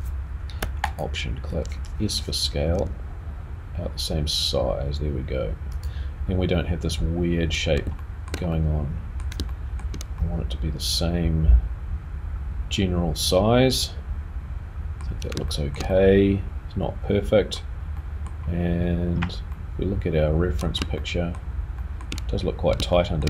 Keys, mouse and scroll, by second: 0.8 alt+click, 2.7 s, 7.6-7.9 scroll down 1, 8.0 shift+middle click, 8.0 shift+scroll up 1, 8.3 shift+scroll down 1, 8.5 middle click, 9.5 shift+middle click, 10.2 middle click, 15.1 scroll down 2, 15.6 shift+middle click, 15.9 middle click, 17.7 scroll down 1, 17.9 scroll up 1, 18.0 middle click, 19.6 middle click, 21.0 shift+middle click, 21.8 middle click, 22.9 shift+middle click.